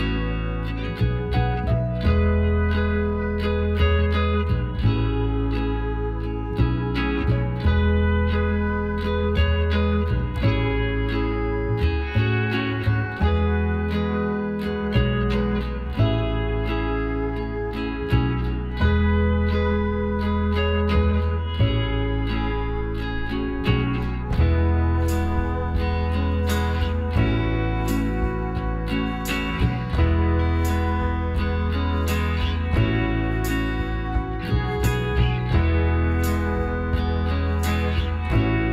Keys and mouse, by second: 0.6 b, 2.2 s, 5.4-7.1 drag, 8.2-9.9 right drag, 11.5 Tab, 12.6 z, 13.9 a, 18.8-29.4 middle drag, 28.5-30.3 right drag, 31.9 Tab, 33.5 z, 34.1 z, 34.6-37.2 middle drag, 36.0 KP_Divide, 37.7 KP_Decimal, 38.6 middle click.